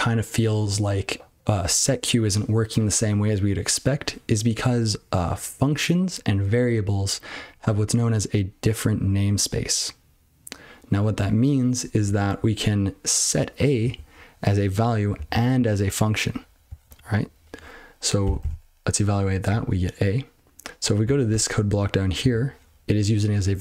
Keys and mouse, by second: 13.8 click, 13.9 click, 15.1 click, 15.2 click, 18.4 ctrl+c, 21.0 click, 21.1 click, 21.3 Tab, 22.2 click, 22.3 click.